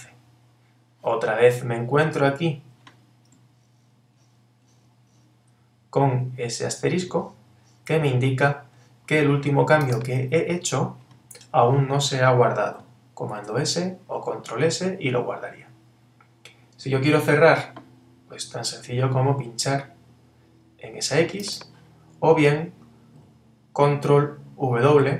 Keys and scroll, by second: 13.3 super+s, 24.9 super+w.